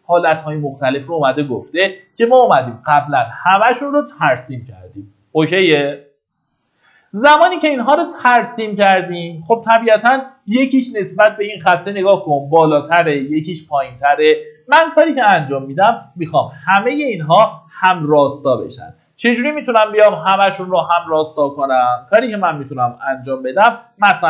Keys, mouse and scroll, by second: 3.1 Escape, 3.4-4.8 scroll up 1, 14.1-14.9 scroll down 1, 18.3 middle click, 22.9 scroll up 1, 23.9 click.